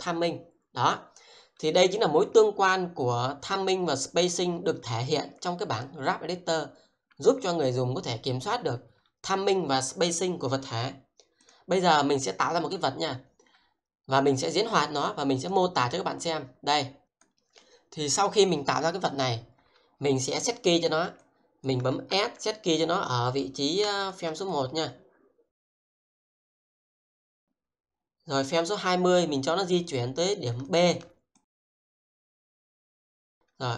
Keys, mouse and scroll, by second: 17.0 click, 20.4-21.0 scroll down 1, 21.2 alt+click, 22.1 s, 23.9 shift+click, 30.7 alt+click, 32.5 alt+click, 32.8 alt+middle click.